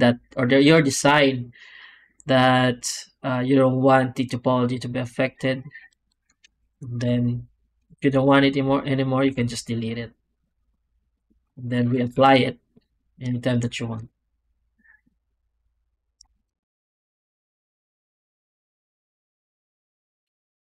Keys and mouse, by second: 5.8 click, 6.5 alt+shift+z, 7.8 shift+click, 9.1 x, 10.9 click, 11.3 Tab, 11.7 Tab, 12.0 shift+q, 16.3 z, 17.9 z, 18.4 click, 20.2 shift+drag.